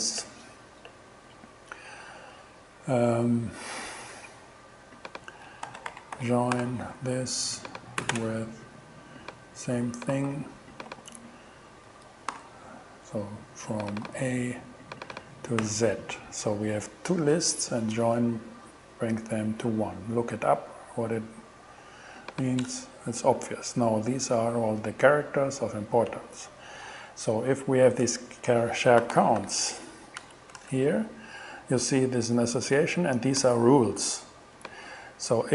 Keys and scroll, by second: 5.4-6.7 typing, 8.0 ,, 8.1 space, 10.1 super+c, 10.9 super+v, 11.9 alt+super+v, 12.3 alt+6, 14.1 shift+a, 15.6 shift+z, 23.6 shift+Return, 28.8-29.9 typing, 30.2 Return.